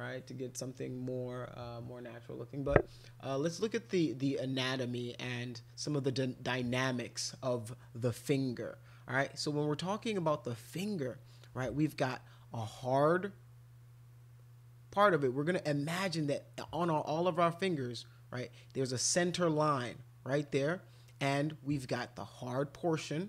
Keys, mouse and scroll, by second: 3.6-5.9 middle drag.